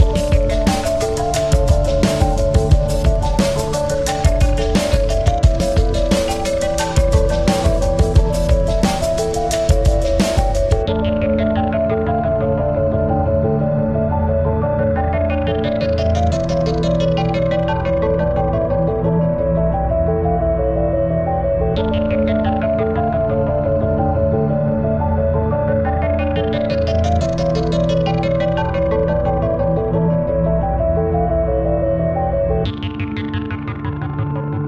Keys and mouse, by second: 0.4 click, 2.3 click, 2.3 click, 3.9 click, 5.0 click, 6.5 click, 7.5 ctrl+=, 8.2 ctrl+=, 8.7 space, 9.0 click, 9.2 space, 10.1 ctrl+=, 10.5 space, 11.8 click, 13.0 click, 13.2-18.4 shift+drag, 18.8 click, 21.9 ctrl+z, 23.3 click, 25.1 typing, 27.5 click, 28.6 typing, 28.8 click, 30.1 click, 30.1 typing, 32.8 click, 32.8 typing, 33.5-34.6 alt+drag.